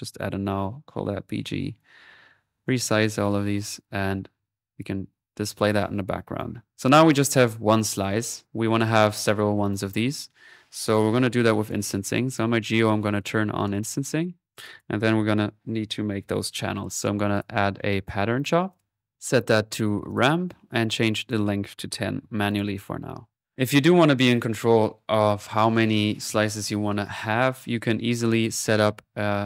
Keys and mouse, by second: 0.2 alt+n, 0.2-1.3 alt+drag, 2.1 middle click, 2.3 right click, 3.2 click, 3.8 click, 4.4 click, 5.0 click, 5.4 middle click, 6.4 click, 7.0-14.2 drag, 12.4 typing, 14.6 click, 15.3 alt+p, 15.8-17.0 typing, 17.4-19.1 drag, 19.1 middle click, 19.2 click, 20.1-22.2 drag, 28.5-29.4 right drag.